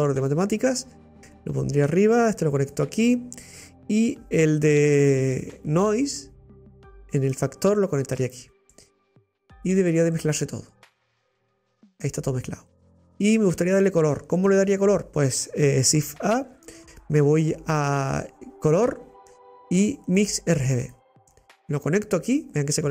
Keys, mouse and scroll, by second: 0.3 click, 1.9 click, 4.3 scroll down 3, 7.0 click, 7.4-10.6 drag, 11.3-11.6 scroll up 5, 11.9-13.0 middle drag, 13.0 click, 13.5-13.8 scroll down 2.